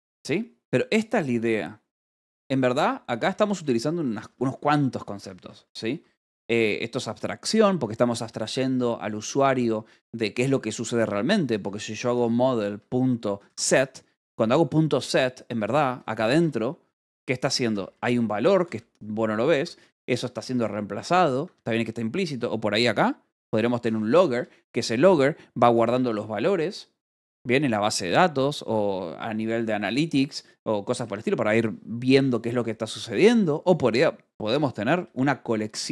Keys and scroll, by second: 3.0 k, 3.9 j, 5.0 Escape, 5.2-6.4 typing, 8.7 j, 11.2-14.5 typing, 15.4 Escape, 15.8 j, 17.6 k, 18.3 j, 19.1 shift+v, 19.4 Escape, 20.9-24.8 typing, 21.2 Escape, 26.0 Escape, 31.0-31.8 typing, 33.2 k, 34.9 o.